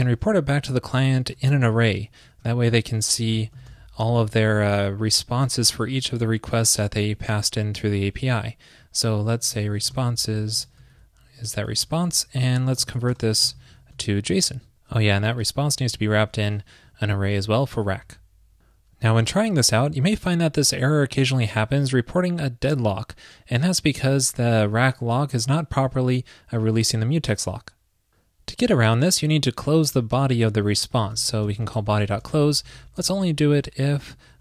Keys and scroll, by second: 0.7 super+Right, 1.4 super+/, 2.6 alt+shift+Left, 2.7 alt+shift+Left, 4.6 alt+Left, 11.0 alt+Left, 11.5 alt+Left, 11.8 alt+Right, 14.3 super+s, 15.0 alt+shift+Left, 15.2 alt+shift+Left, 15.4 alt+shift+Left, 15.8 alt+shift+Left, 17.9 super+s.